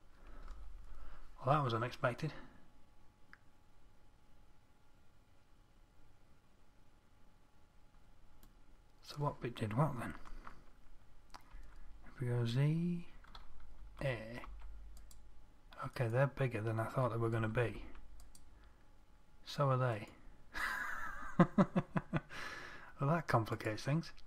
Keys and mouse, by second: 12.0 z, 14.3 a, 14.9 c, 17.8 a, 18.2 c, 21.8-24.1 drag.